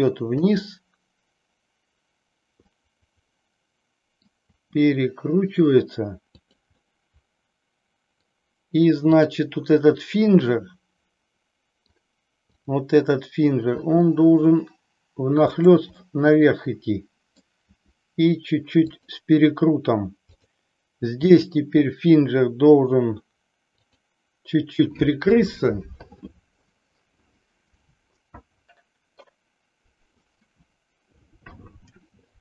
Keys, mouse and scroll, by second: 0.6 click, 2.7-4.4 middle drag, 4.6 r, 6.8-8.3 middle drag, 9.2-10.0 drag, 10.4-12.1 middle drag, 12.6 click, 14.0 r, 16.1-17.4 middle drag, 17.7 r, 19.2 click, 20.3 click, 21.3 r, 24.2 click.